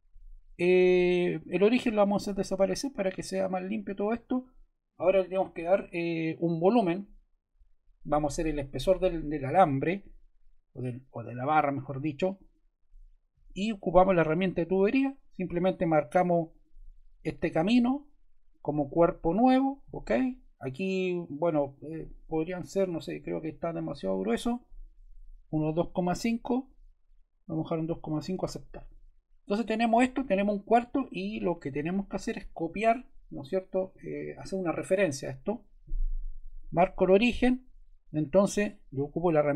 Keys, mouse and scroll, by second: 12.2-13.4 drag, 14.1-15.3 drag, 16.4-17.6 drag, 25.2-26.6 typing, 28.1 click, 36.5 click.